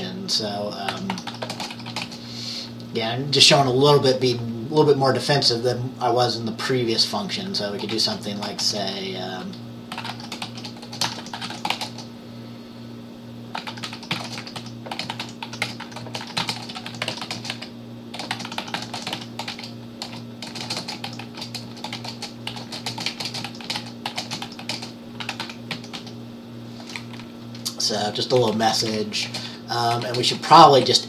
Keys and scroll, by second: 1.0-2.5 typing, 8.7-12.3 typing, 13.4-31.0 typing.